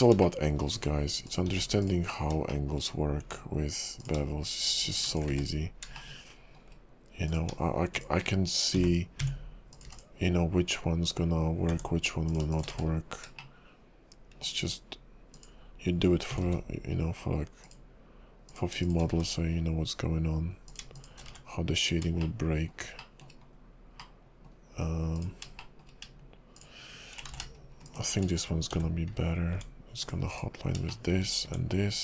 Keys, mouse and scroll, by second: 0.2 shift+middle click, 0.7 Tab, 1.3 click, 1.5 x, 2.5 shift+middle click, 2.9-3.2 scroll up 1, 3.2 Tab, 4.0 click, 4.8 click, 5.1 shift+click, 5.2 shift+click, 5.6 1, 6.0 shift+middle click, 7.3 click, 7.9 click, 8.9 j, 9.2 Tab, 9.7 click, 9.9 x, 11.7 Tab, 12.3 click, 12.5 shift+click, 13.0 scroll down 3, 13.0 1, 13.4 shift+middle click, 14.6-15.3 scroll up 2, 15.3 click, 16.3 g, 18.5 click, 18.8 shift+click, 19.4 1, 20.7 click, 21.0 shift+click, 21.5 1, 21.9 scroll down 1, 22.2 shift+middle click, 23.0 shift+middle click, 23.4 scroll up 2, 24.0 middle click, 25.2 click, 25.6 shift+middle click, 26.6 shift+click, 27.5 ctrl+shift+z, 27.8 shift+click, 28.9 j, 29.5 Tab, 30.0 click, 30.2 x, 30.9 shift+middle click, 31.4 Tab.